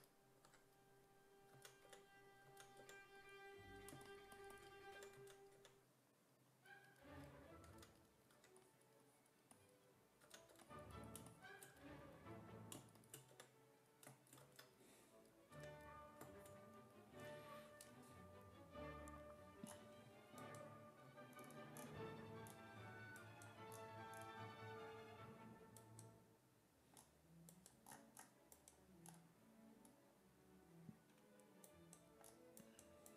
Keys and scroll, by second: 0.5 2, 1.6 s, 1.9 5, 2.5 s, 2.8 5, 4.7-6.1 typing, 7.7 s, 8.4 1, 10.3 s, 10.5 2, 13.3 5, 15.6 w.